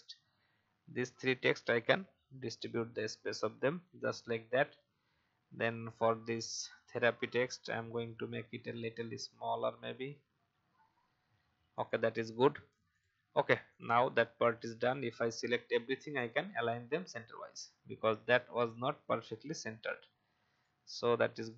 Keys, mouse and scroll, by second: 3.8 alt+scroll down 1, 4.3-5.1 scroll up 1, 7.6 click, 11.7 right click, 12.9-15.8 drag, 18.5 Left, 20.5-21.5 drag.